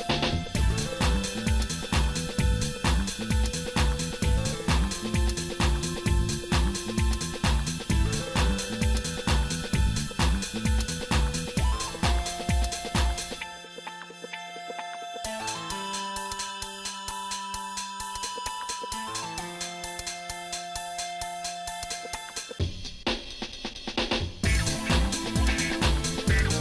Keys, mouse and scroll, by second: 2.2 click, 6.2-10.1 shift+middle drag, 10.8 click, 11.2 Tab, 12.2 a, 13.6 click, 15.2 click, 17.4 click, 18.4 click, 19.1 Tab, 20.1 shift+middle click, 20.7 click, 21.3 shift+middle click, 23.1 g, 24.5-26.6 shift+middle drag.